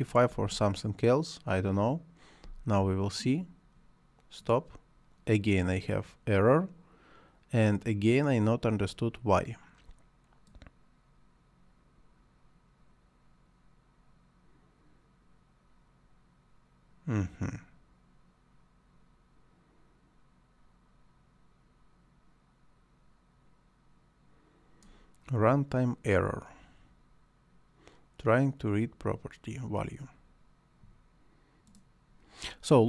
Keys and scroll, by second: 0.3 space, 2.4 space.